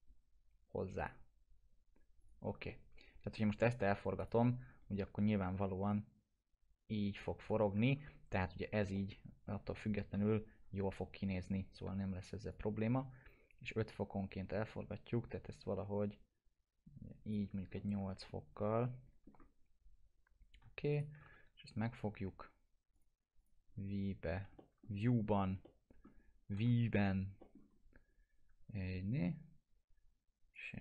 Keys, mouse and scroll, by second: 2.7-3.6 alt+middle drag, 4.2 click, 4.7 scroll down 1, 5.1 e, 5.9-7.8 drag, 7.8 ctrl+z, 8.1 scroll down 1, 8.9-9.6 alt+middle click, 10.1 t, 10.7 scroll down 1, 11.3 middle click, 11.9 e, 12.5-17.5 drag, 17.5 scroll down 1, 17.7-19.3 alt+middle drag, 20.9 ctrl+click, 21.3 w, 22.9 click, 24.6 alt+middle click, 25.3 middle click, 25.6-26.3 alt+middle click, 26.5 typing, 27.0 scroll down 1, 27.4 middle click, 27.7 scroll up 1, 30.5-30.8 drag.